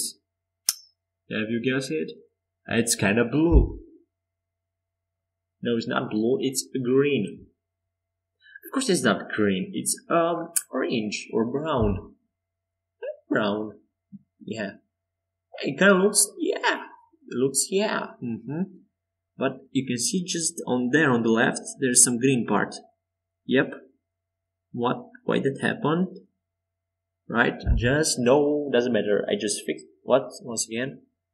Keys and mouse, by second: 4.4-11.4 drag, 11.5 Tab, 13.2-16.7 drag, 18.6-21.9 alt+drag, 24.7 Tab, 28.9-30.7 drag, 30.7 middle click.